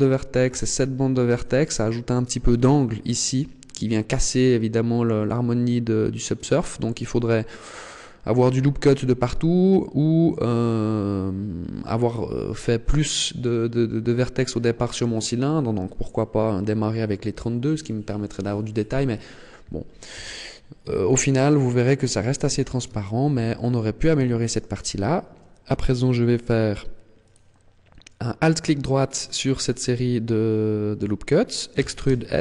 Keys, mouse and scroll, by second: 0.4 alt+shift+right click, 1.2 alt+shift+right click, 1.6 middle click, 20.0 a, 20.8 scroll down 2, 21.4 middle click, 23.4 scroll up 4, 24.1 shift+middle click, 27.1 alt+right click, 28.8 middle click, 31.6 e.